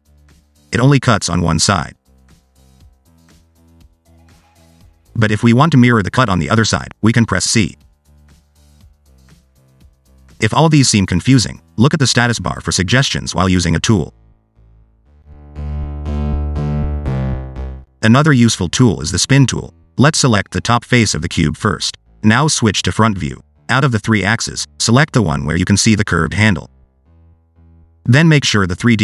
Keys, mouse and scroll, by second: 1.7 middle click, 2.2 middle click, 3.0 ctrl+z, 6.3 click, 9.1 middle click, 11.5 ctrl+z, 12.4 middle click, 13.5 click, 17.4 middle click, 19.0 click, 19.5 scroll down 1, 21.5 3, 21.9 click, 24.5 scroll down 1, 26.1 click, 27.8 click, 28.1 click.